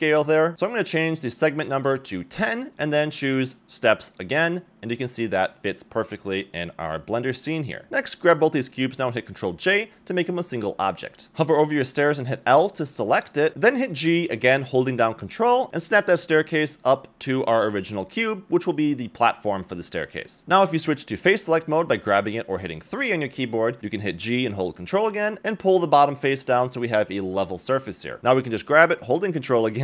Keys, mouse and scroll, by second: 1.5 click, 3.9-4.9 drag, 7.5 click, 8.4 shift+click, 10.6 ctrl+j, 11.3 click, 12.6 l, 13.6 g, 16.2 scroll down 1, 16.4 middle click, 17.8 middle click, 21.2 click, 21.2 g, 22.9 middle click, 23.6 Tab, 23.8 scroll down 1, 24.0 middle click, 24.2 a, 24.3 a, 24.6-25.6 middle drag, 25.9-26.3 middle drag, 26.6 click, 27.4 KP_1, 29.0-29.6 scroll down 1.